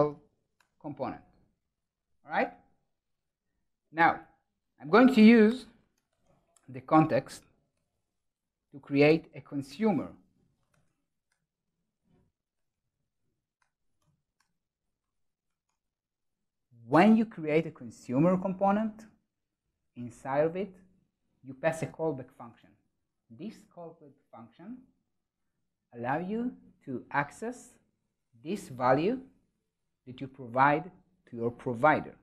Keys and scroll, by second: 11.6 super+s, 15.3 Tab.